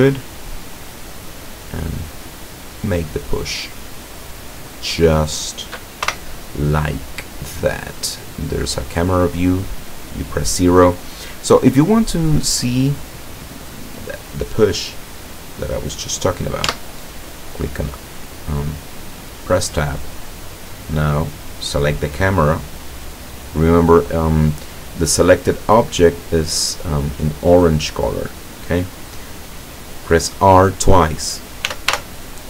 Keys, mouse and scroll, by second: 3.5 click, 3.9-5.4 middle drag, 5.4-5.8 scroll down 1, 6.1 KP_0, 7.3-7.6 scroll down 2, 16.7 Tab, 20.2 right click, 31.8 r.